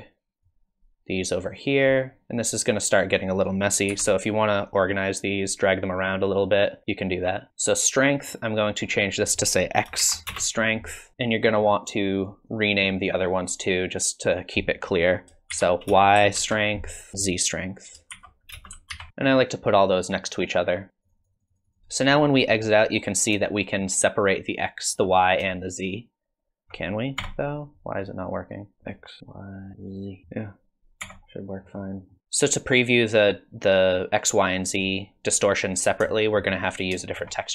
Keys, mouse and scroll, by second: 0.4 click, 2.5 click, 3.9 g, 8.6 click, 12.5 click, 13.4 click, 14.2 click, 17.1-20.0 click, 19.8 click, 20.2 click, 20.6 click, 20.9-21.5 click, 20.9 scroll down 10, 21.0 click, 21.7 click, 21.8 click, 22.6 click, 23.5 shift+click, 25.4 click, 26.6 shift+click, 27.2 Tab, 28.8 middle click, 28.8 scroll down 5, 29.2 middle click, 31.0 Tab, 31.6-32.1 scroll up 4, 32.1 middle click, 36.1 shift+middle click, 37.2 shift+middle click.